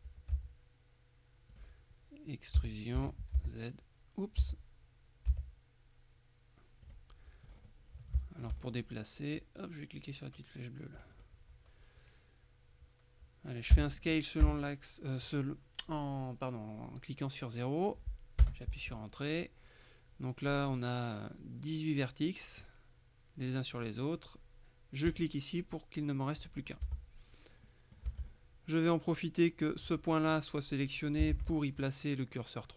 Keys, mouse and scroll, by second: 0.4 s, 1.6 click, 2.7 e, 3.1 Escape, 3.4 z, 4.5 z, 5.4 s, 6.9 click, 7.6-8.2 scroll up 2, 8.3 shift+click, 9.5-11.3 drag, 13.8 s, 14.5 KP_0, 18.5 KP_Enter, 22.3 middle click, 25.2 click, 26.6-27.7 scroll down 4, 26.9 Tab, 27.7 middle click, 28.1 Tab, 28.3-28.9 scroll up 2, 31.4 shift+s.